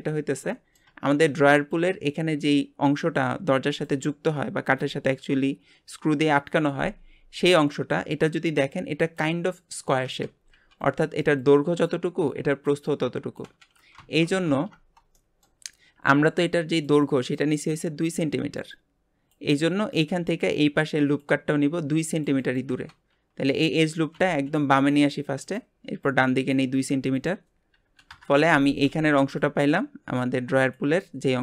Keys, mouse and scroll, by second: 0.5 shift+middle click, 1.0 scroll up 1, 14.0 Tab, 15.1 shift+middle click, 15.6-15.9 scroll up 1, 24.1 g, 26.0 click, 27.1-31.4 drag.